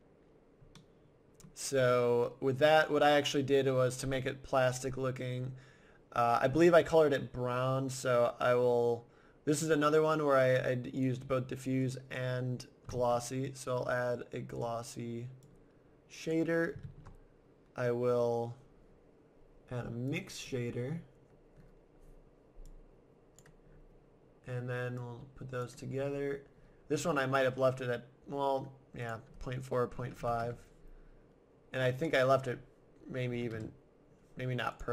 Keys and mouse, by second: 0.8 middle click, 2.0 middle click, 3.9-5.5 drag, 12.9 shift+a, 16.8 shift+a, 22.7-23.9 drag, 24.4 middle click, 26.6 middle click, 27.0-28.5 middle drag, 31.0 middle click, 33.7 middle click, 34.7-34.9 right drag.